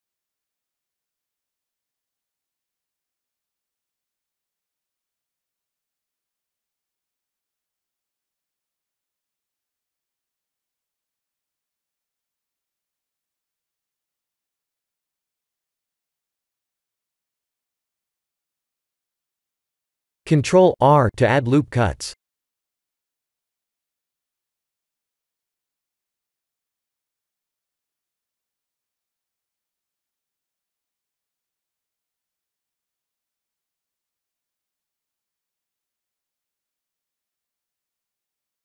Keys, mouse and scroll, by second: 0.2 e, 2.2 shift+middle click, 4.0 e, 4.6 s, 5.7 e, 7.4 e, 9.7 s, 11.1-11.8 scroll down 10, 11.8 shift+z, 12.3-12.9 scroll up 7, 13.2 shift+middle click, 14.3 shift+middle click, 14.8 shift+middle click, 15.5 Tab, 16.7 right click, 18.0 Tab, 19.2-19.8 scroll up 4, 20.6 ctrl+r, 22.5 ctrl+r, 27.7 ctrl+r, 29.2 ctrl+r, 32.9 ctrl+r, 36.0 Tab, 37.6 shift+middle click, 38.2 shift+middle click.